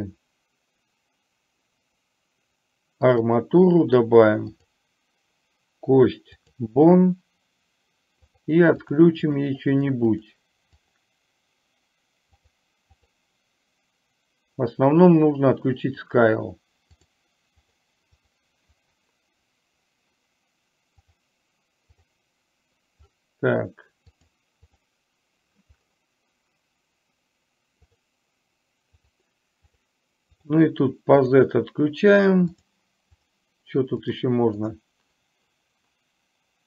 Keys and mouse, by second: 4.6-6.6 drag, 8.4 click, 8.9 click, 9.3 click, 10.1 click, 10.9 click, 17.0 click, 17.8 click, 21.1 click, 24.3 click, 24.8 click, 29.8 click, 30.4 click, 31.3 click, 32.6 click, 33.3 click.